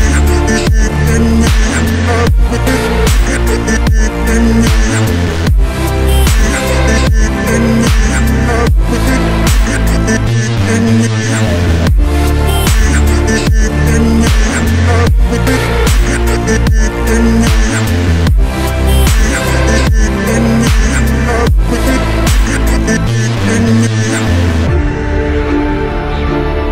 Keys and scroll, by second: 1.3 Delete, 12.8 shift+F2, 13.0 F3, 25.8 Delete.